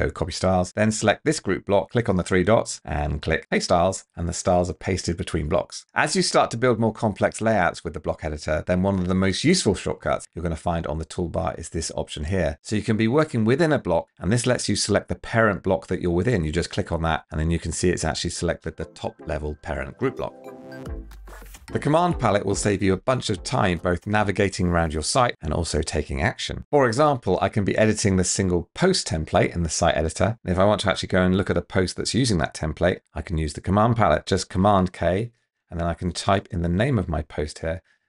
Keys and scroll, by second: 34.8 super+k.